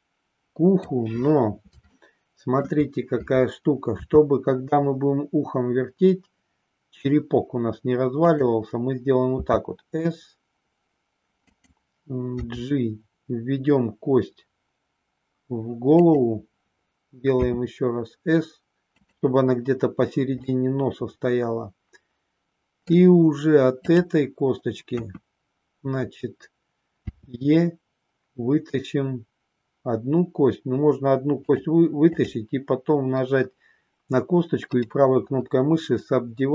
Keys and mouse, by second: 1.9 shift+middle click, 3.9 r, 9.3 s, 17.3 s, 20.4-22.9 middle drag, 24.9 KP_1, 27.0 e, 32.1 click, 34.8-36.5 right drag.